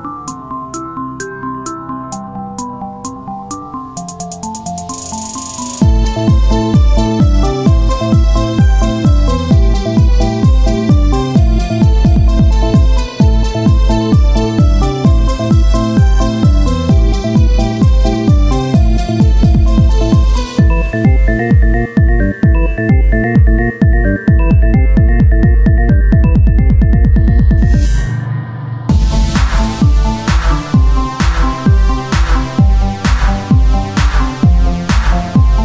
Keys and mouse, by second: 0.1 r, 1.4 Tab, 3.4 KP_1, 5.5 z, 5.9 KP_1, 6.1 z, 7.7 Tab, 9.4 z, 9.4 shift+d, 12.5 s, 15.3 t, 16.2-17.5 drag, 16.5 t, 17.5 Tab, 18.0 ctrl+Tab, 19.6 z, 21.1 w, 21.9 ctrl+Tab, 23.6 f, 24.8 ctrl+z, 26.7 Tab, 27.4 Tab, 27.8 a, 28.6 a, 28.6 s, 31.9 z, 33.4-35.6 drag, 33.4 z.